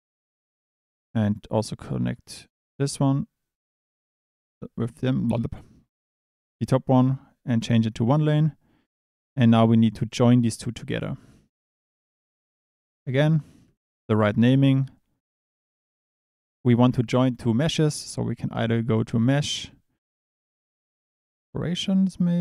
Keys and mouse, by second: 0.3 click, 1.3 click, 7.2 click, 10.0 drag, 10.5 click, 11.0 click, 12.6 click, 13.6 click, 14.0 shift+a, 17.8 shift+a.